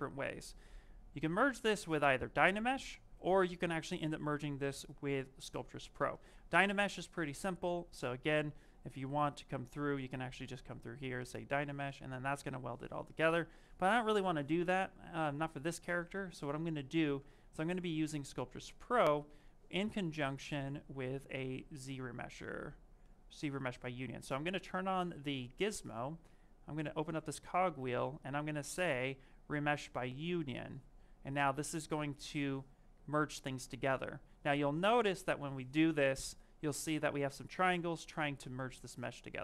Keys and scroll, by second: 16.5 s, 18.8 w.